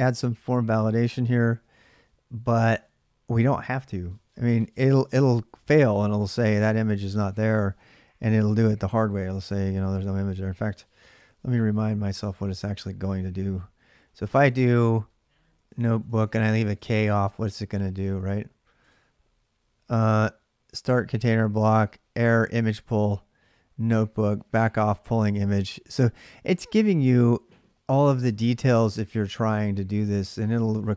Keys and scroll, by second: 0.2-1.6 typing, 10.9 alt+Tab, 15.4-16.2 BackSpace.